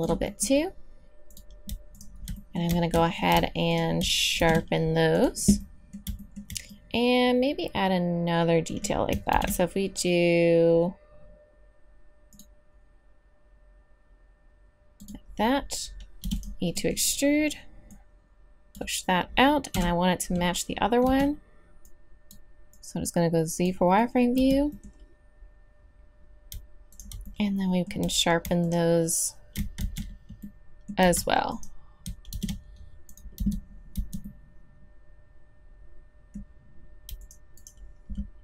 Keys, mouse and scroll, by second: 2.3 middle click, 3.1-4.9 drag, 4.4 shift+e, 5.6 click, 8.5 middle click, 9.3 ctrl+r, 16.2 e, 16.8 middle click, 17.9-19.4 drag, 19.5 click, 19.7 KP_1, 21.0 z, 24.4 z, 29.8 ctrl+z, 31.5 right click, 32.3 shift+e, 33.4 z, 33.9 z.